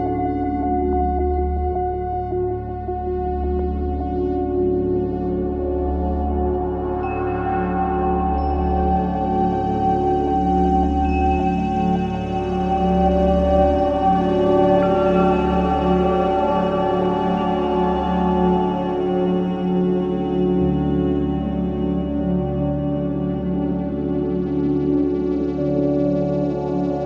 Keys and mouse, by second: 0.0 click, 1.5-3.1 alt+drag, 3.4 click, 4.3 click, 4.4 typing, 5.6 click, 5.6 typing, 7.3 ctrl+s, 8.0 click, 8.9 click, 10.5 click, 11.1 alt+click, 12.0 typing, 12.4 click, 14.2 click, 14.3 click, 15.2-23.2 typing, 24.5 Return, 26.0-27.0 drag.